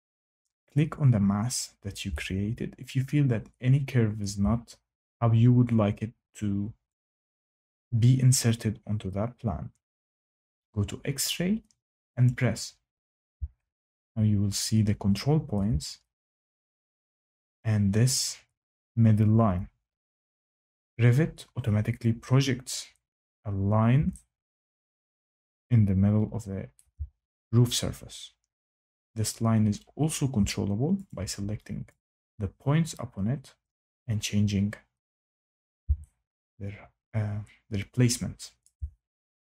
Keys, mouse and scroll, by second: 0.6 click, 4.1 shift+middle click, 12.2 click, 15.5 shift+middle click, 26.7 shift+middle click, 31.0 click, 32.7 click, 35.4 click, 38.6 shift+right click.